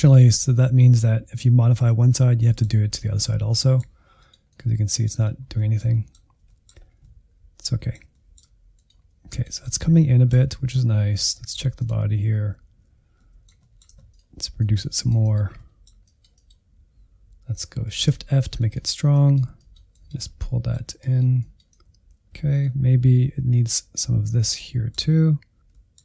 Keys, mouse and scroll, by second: 2.4-4.2 middle drag, 4.2-5.5 drag, 5.5-6.8 middle drag, 6.8 scroll up 2, 7.0-8.8 middle drag, 8.8 click, 9.5 middle click, 10.4 alt+z, 10.8 ctrl+click, 11.2 alt+z, 11.5-12.5 shift+middle drag, 12.5-13.1 scroll up 2, 12.7 shift+middle click, 13.1 middle click, 14.1-15.5 drag, 15.5 middle click, 16.1-17.9 drag, 17.9 shift+f, 19.1-20.2 drag, 20.2 middle click, 21.0-22.3 drag, 22.3 middle click, 22.4 scroll down 2, 22.5 middle click, 22.7 alt+z, 23.0 ctrl+click, 23.2-25.4 middle drag, 25.4 shift+f.